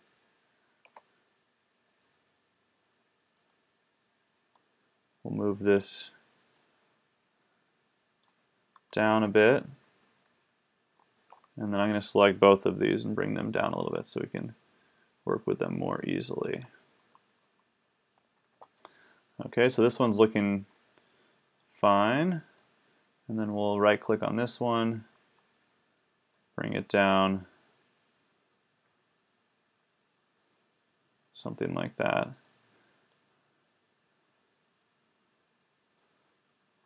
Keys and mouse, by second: 1.5 middle click, 3.4 right click, 3.7-4.9 drag, 8.3 middle click, 11.1 click, 12.8 middle click, 13.8 middle click, 15.3-16.2 drag, 20.8 middle click, 22.5-24.1 drag, 24.1 middle click, 26.4-31.5 drag, 34.2 click.